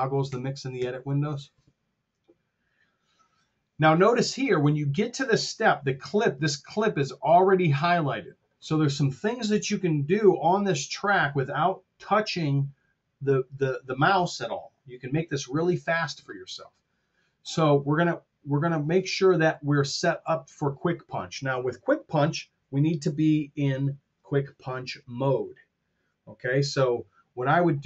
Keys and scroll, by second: 0.6 super+=.